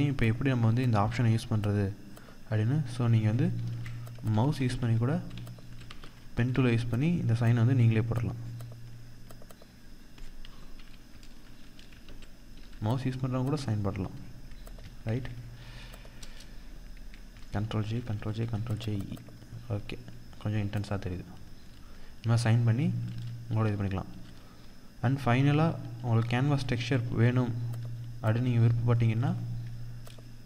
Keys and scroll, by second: 1.8 ctrl+z, 3.1 ctrl+z, 3.7 ctrl+=, 3.9 ctrl+space, 5.2 ctrl+=, 5.4 ctrl+space, 11.3 ctrl+-, 11.9 ctrl+0, 14.4 ctrl+t, 15.5 Return, 16.9 ctrl+j, 17.1 ctrl+e, 17.3 ctrl+j, 17.4 ctrl+e, 17.6 ctrl+j, 17.8 ctrl+e, 22.4 ctrl+=, 26.4 ctrl+-.